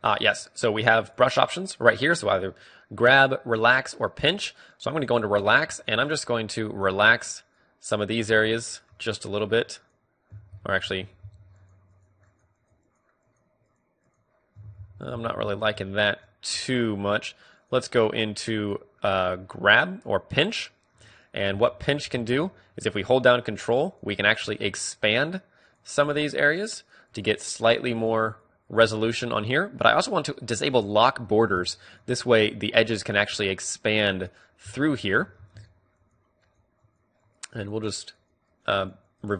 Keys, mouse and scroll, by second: 7.4-11.4 drag, 7.4 middle click, 10.7 ctrl+z, 11.0 ctrl+z, 11.4 ctrl+z, 11.7-14.9 drag, 14.9 ctrl+z, 15.3 ctrl+z, 15.6 ctrl+z, 16.1-22.1 drag, 22.1 middle click, 22.1 f, 23.1-39.3 drag, 34.8 ctrl+z.